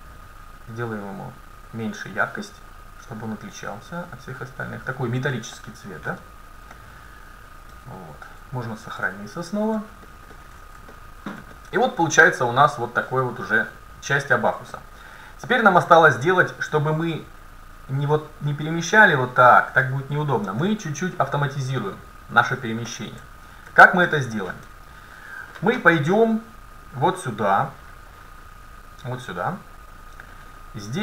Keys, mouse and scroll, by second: 5.6-8.1 middle drag, 6.1 KP_7, 7.8 a, 8.9 ctrl+s, 10.1-13.2 middle drag, 14.1 middle click, 16.1 middle click, 17.0-18.9 right drag, 18.6-20.5 drag, 20.5 ctrl+z, 22.9-23.9 middle drag, 23.7 a, 27.0-30.7 drag.